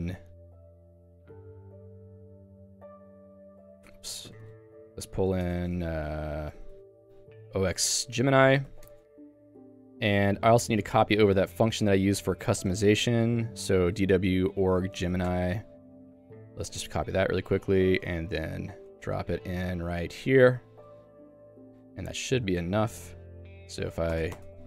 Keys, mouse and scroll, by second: 0.1-5.8 typing, 1.9 Escape, 6.9-9.9 typing, 12.8 Return, 13.6-17.6 typing, 15.3 Return, 18.4 Return, 19.1 ctrl+u, 19.2 ctrl+u, 20.0 j, 21.7 p, 22.1 j, 22.8 ctrl+s.